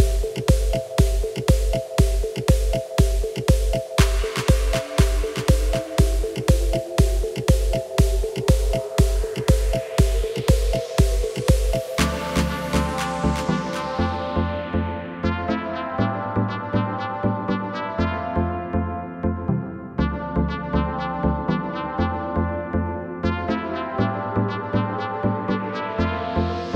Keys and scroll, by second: 2.3 Tab, 6.6 g, 11.2 KP_7, 11.8 Tab, 20.9 Delete.